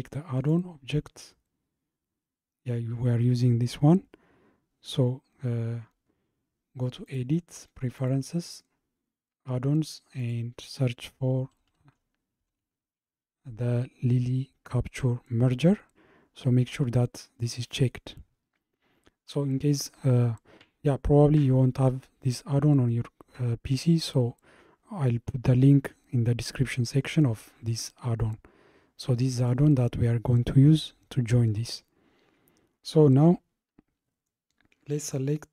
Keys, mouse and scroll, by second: 0.4-3.5 drag, 7.1-10.2 drag, 33.3 scroll down 2.